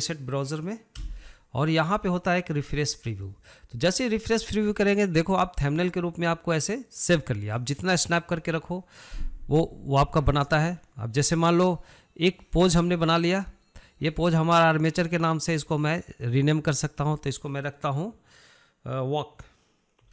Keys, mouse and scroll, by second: 1.5 n, 3.4-6.6 drag, 6.6-9.7 drag, 17.2-20.1 drag.